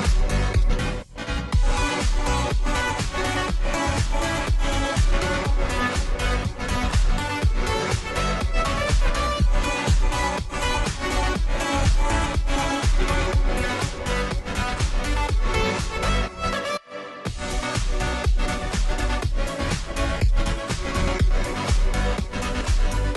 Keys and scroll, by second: 11.5 ctrl+z, 19.1 ctrl+z, 20.5 [, 20.7 [, 21.2 [.